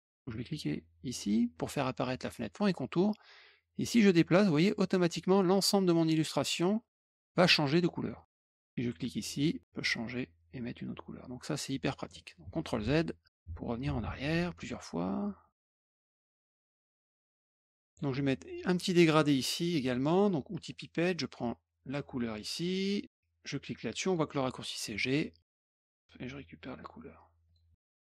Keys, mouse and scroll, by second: 0.5 click, 3.5-5.8 drag, 9.3 click, 9.6-11.8 drag, 12.4 ctrl+z, 12.8 ctrl+z, 13.2 ctrl+click, 13.2 ctrl+z, 13.8 ctrl+z, 14.0 ctrl+z, 14.6 ctrl+z, 15.5 ctrl+z, 16.6 ctrl+shift+z, 16.8 ctrl+shift+z, 17.4 click, 17.8 click, 20.5 click, 21.8 alt+click, 24.0 click, 24.9 click, 26.7 click, 27.4 click, 28.0 click.